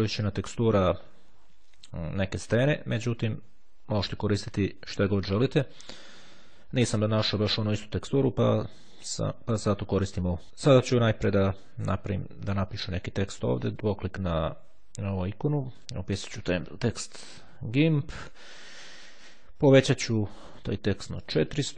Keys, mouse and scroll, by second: 0.8-3.2 drag, 3.2-4.0 ctrl+scroll down 2, 12.0 click, 13.7 click, 15.9 click, 17.6-18.8 typing, 19.5 click, 21.0 KP_4, 21.3 KP_0.